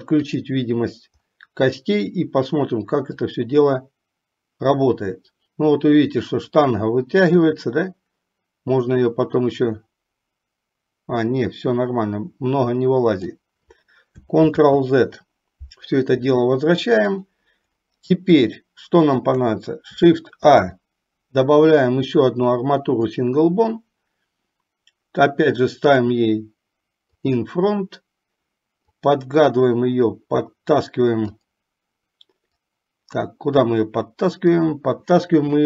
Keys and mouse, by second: 0.3 click, 3.4-13.5 drag, 14.6 ctrl+z, 17.2 click, 18.7-19.4 shift+middle drag, 20.6 shift+a, 27.3 click, 29.2-31.7 drag, 32.6 click, 34.5 click.